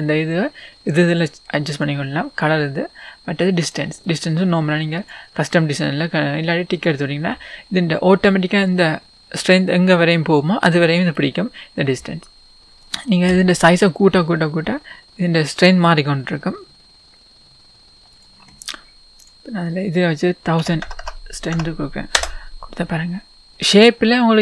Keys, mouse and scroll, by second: 8.1-8.7 scroll down 2, 8.7-10.2 scroll down 1, 10.2-12.6 middle drag, 12.6 click, 12.6 s, 13.7 s, 18.2 click, 22.2-23.5 drag, 22.2 KP_0, 23.7-24.4 scroll down 1.